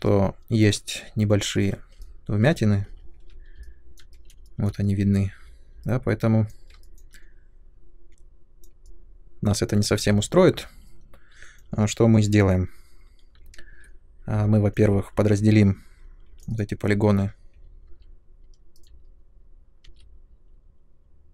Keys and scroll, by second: 3.0 ctrl+1, 10.0 Tab, 13.5 ctrl+1, 16.2 3, 17.8 ctrl+d, 19.8 shift+d.